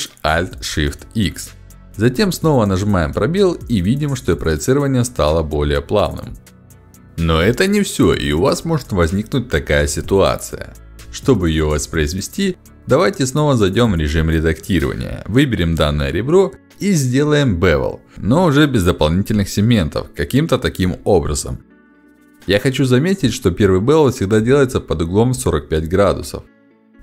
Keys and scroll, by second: 1.7 space, 12.8 ctrl+b, 24.3 ctrl+b.